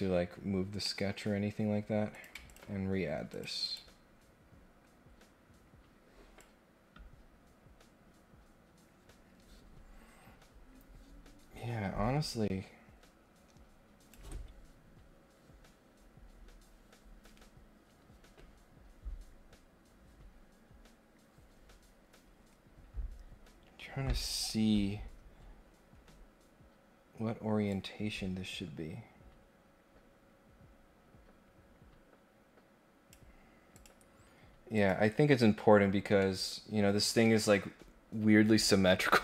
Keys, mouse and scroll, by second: 0.7 scroll down 2, 0.8 middle click, 1.4 scroll up 2, 2.1 click, 2.4 ctrl+click, 3.3 click, 3.6 click, 3.9 scroll up 1, 4.1 scroll down 1, 4.3 scroll up 1, 6.4-14.1 drag, 27.7-33.1 drag, 33.7 click, 34.7 click, 36.1 middle click.